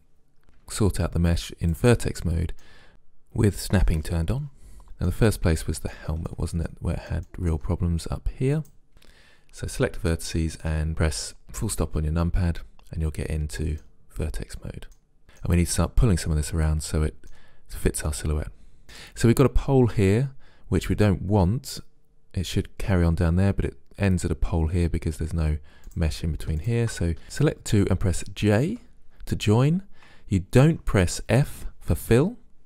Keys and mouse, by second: 0.7 ctrl+Tab, 2.2 middle click, 4.9 middle click, 5.4-7.9 middle drag, 8.9 KP_Decimal, 11.9-13.4 middle drag, 14.6-16.3 middle drag, 18.1-21.4 middle drag, 26.0-27.2 drag, 27.2 ctrl+z, 28.9 j.